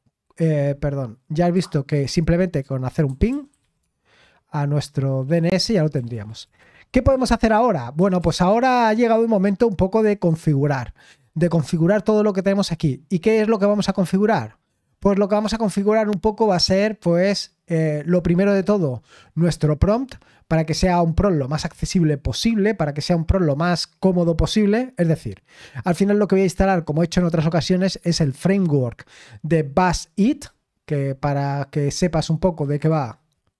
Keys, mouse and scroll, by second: 1.4 click, 3.0-3.8 typing, 5.9-8.4 typing, 31.8 click, 32.7 click.